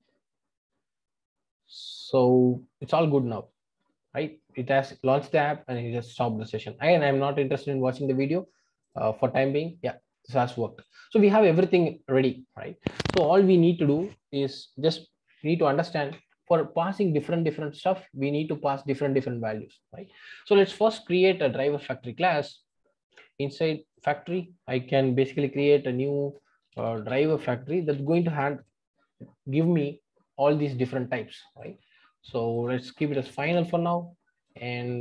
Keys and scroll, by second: 25.6 super+n.